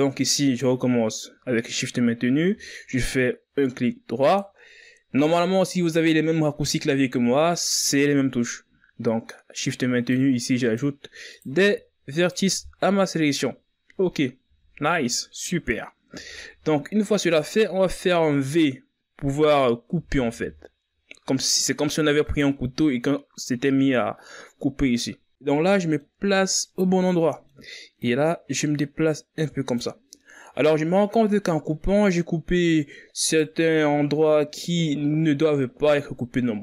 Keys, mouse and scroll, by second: 0.8 right click, 4.6 shift+right click, 10.4 shift+right click, 11.0 shift+right click, 11.7 shift+right click, 12.5 shift+right click, 13.9-14.4 scroll down 1, 14.4-14.9 scroll up 5, 14.9 z, 16.2 scroll up 2, 16.5 z, 20.3 v, 25.8-26.2 scroll down 5, 26.2 middle click, 26.6-27.0 scroll up 2, 27.0-28.4 middle drag, 28.4-30.6 drag, 30.6-32.4 middle drag, 32.4-33.6 scroll up 1, 33.6 right click.